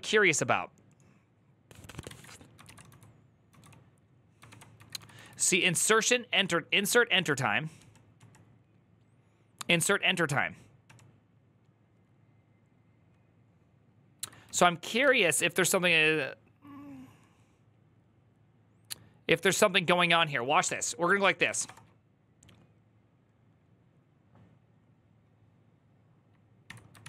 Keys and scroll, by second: 1.9 alt+{, 2.4 ctrl+c, 2.6-8.0 typing, 4.2 ctrl+d, 10.6 typing, 14.4 typing, 14.8 alt++, 19.3 alt+{, 20.4-21.8 typing, 26.4 Tab, 26.8 ctrl+c, 26.9 ctrl+c, 27.0 ctrl+c.